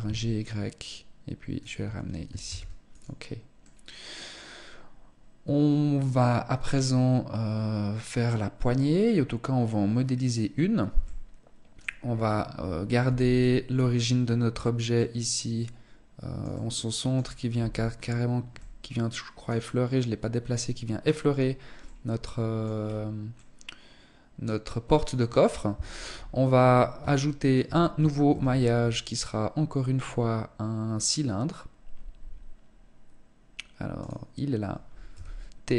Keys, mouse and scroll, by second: 1.0 click, 1.2 Tab, 1.8 ctrl+s, 3.0 middle click, 8.4-9.5 scroll down 1, 9.5-10.4 scroll down 2, 10.4 middle click, 11.4-12.4 scroll up 5, 12.4 z, 12.8 middle click, 14.3 middle click, 15.8 middle click, 16.9 z, 17.3 scroll up 3, 17.9 middle click, 21.3 middle click, 22.1-22.7 scroll down 5, 22.7 middle click, 24.5 scroll down 2, 25.3 KP_1, 26.1 scroll down 1, 26.5 shift+middle click, 27.6 shift+a, 34.5 t, 35.5 scroll down 4.